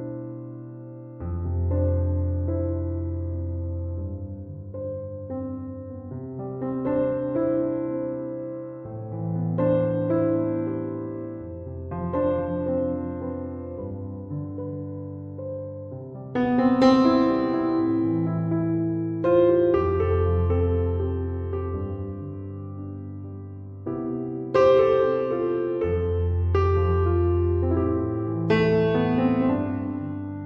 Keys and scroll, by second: 8.4 6, 10.1 Return, 14.0 2, 14.9 Return.